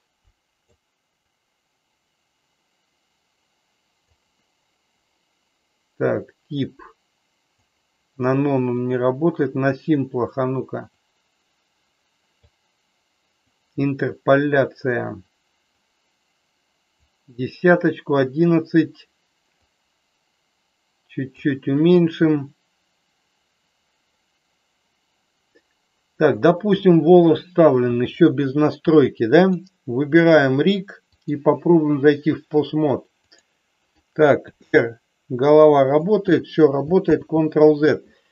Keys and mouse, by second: 1.3-4.1 drag, 6.1-7.6 drag, 8.8 click, 10.9-12.3 drag, 13.4 click, 15.9-17.0 drag, 19.5-21.4 drag, 29.4 click, 31.3 click, 33.3 click, 34.4 r, 37.1 ctrl+z.